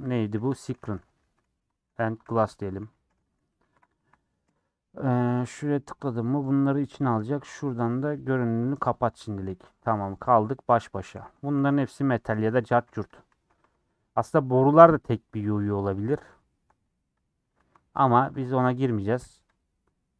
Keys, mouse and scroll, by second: 4.4 s, 9.4-9.7 scroll down 5, 9.7 middle click, 10.6 scroll up 2, 11.1 a, 11.3 Tab, 11.9 click, 12.1 a, 13.1 click, 13.2 a, 13.5 a, 14.2 middle click, 14.4 scroll up 2, 14.9 click, 15.1 shift+middle click, 15.7 shift+click, 16.3 shift+click, 17.1 click, 17.6 a, 18.3 Tab, 18.5 a.